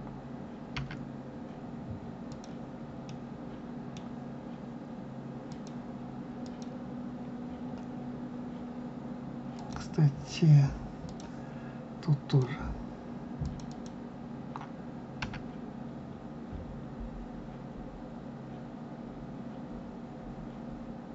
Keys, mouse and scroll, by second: 0.8 s, 3.0-5.5 middle drag, 5.5 click, 6.4 click, 8.1-9.5 scroll up 2, 9.5 click, 11.0 click, 12.3 click, 13.3 click, 13.7 click, 15.2 s.